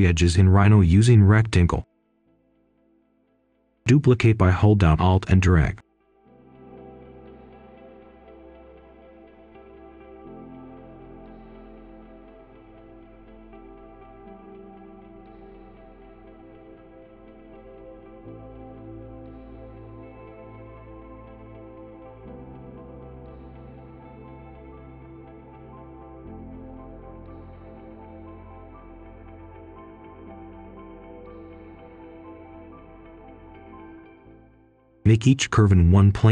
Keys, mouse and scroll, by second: 2.6 scroll down 1, 2.8-3.2 scroll up 1, 3.2 click, 4.0-5.7 alt+drag, 6.1 click, 9.7-16.7 alt+drag, 17.2 ctrl+a, 17.4 ctrl+z, 17.6 ctrl+s, 18.1 Return, 18.6 click, 18.9 scroll down 1, 19.2 right click, 19.7 click, 20.5-21.1 scroll up 1, 21.1 click, 22.9 right click, 23.7 click, 24.2 shift+right click, 25.5 alt+click, 27.5-29.9 alt+drag, 30.9 right click, 32.3 alt+click, 33.9 right click, 34.9 click.